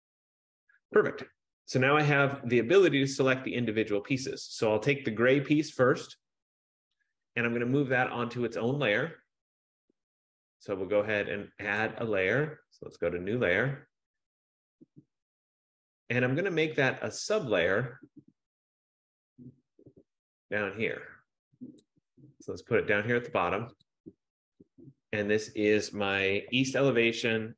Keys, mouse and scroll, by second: 0.0 click, 2.6 click, 3.2 click, 5.1 click, 8.2 click, 12.0 click, 13.3 click, 15.8 click, 21.9 click, 24.0 click, 24.8 click, 25.1 click, 26.6-27.5 typing.